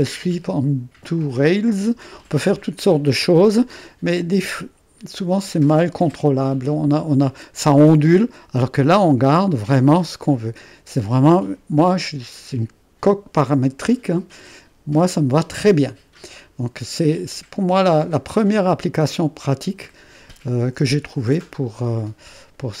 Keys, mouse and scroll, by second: 2.6-3.9 drag, 4.2-9.5 drag, 10.3 click, 12.8-16.3 drag, 17.2-18.3 drag, 18.8 click, 20.2-22.8 drag.